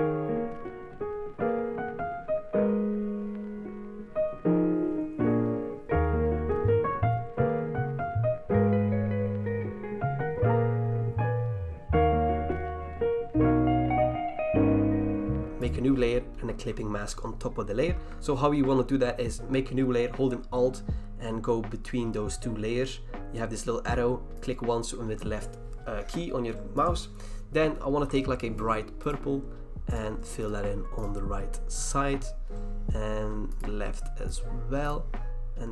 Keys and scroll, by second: 0.3 alt+BackSpace, 0.3 ctrl+d, 2.5 alt+BackSpace, 2.6 ctrl+d, 4.9 alt+BackSpace, 4.9 ctrl+d, 5.2 v, 5.7 v, 7.1-8.5 typing, 10.1 ctrl+z, 10.2 ctrl+t, 10.6 ctrl+d, 10.9 ctrl+d, 14.0 ctrl+e.